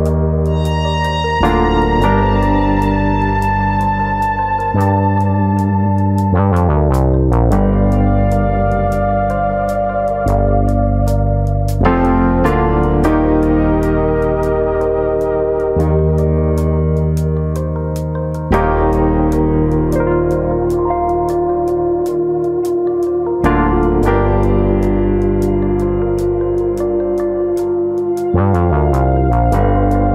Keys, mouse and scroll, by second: 0.4 click, 1.0 click, 2.0 middle click, 2.2 scroll down 2, 2.4 middle click, 3.0 scroll down 1, 3.3 middle click, 3.8 click, 4.0 middle click, 4.6 click, 5.3 middle click, 5.8 click, 6.3 middle click, 6.7 click, 6.8 middle click, 7.4 click, 7.9 middle click, 8.5 click, 9.1 click, 9.8 middle click, 10.2 middle click, 10.7 click, 10.9 middle click, 11.6 click, 12.4 middle click, 13.1 click, 13.3 middle click, 13.8 click, 14.4 middle click, 14.8 middle click, 15.2 middle click, 15.5 middle click, 18.0-18.4 scroll up 2, 18.4 click, 18.7 shift+click, 18.9 middle click, 19.5 middle click, 20.0 click, 21.0 click, 21.1 shift+click, 21.9 click, 22.2 middle click, 22.6 click, 23.1 shift+click, 23.4 shift+click, 23.4 middle click, 24.0 click, 24.5 middle click, 24.8 scroll up 2, 25.0 shift+middle click, 25.3 middle click, 26.3 ctrl+r, 28.8 click, 29.0 middle click, 29.5 click, 29.8 middle click.